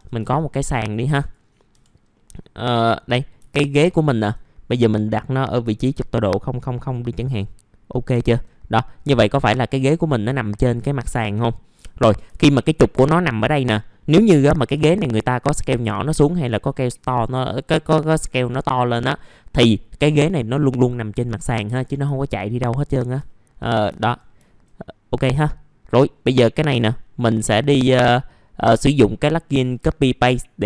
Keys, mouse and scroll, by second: 0.6-1.5 scroll down 1, 1.5 click, 2.1 F4, 2.5 middle click, 4.3-6.0 alt+middle drag, 6.0 right click, 8.3 scroll up 1, 8.6 alt+middle click, 9.7 click, 10.5 scroll up 1, 10.7 alt+middle click, 13.9 middle click, 15.2 r, 15.9-21.3 drag, 22.6 alt+middle click, 23.5 scroll down 1, 23.7 alt+middle click, 24.5 alt+middle click, 24.9 alt+middle click, 25.7 right click.